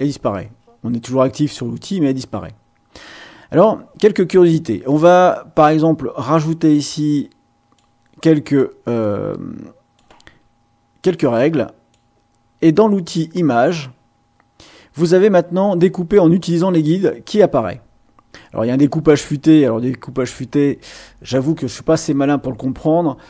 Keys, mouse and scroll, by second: 5.1-6.5 drag, 7.2 click, 9.0-10.1 drag, 11.1-12.1 drag, 13.2 click.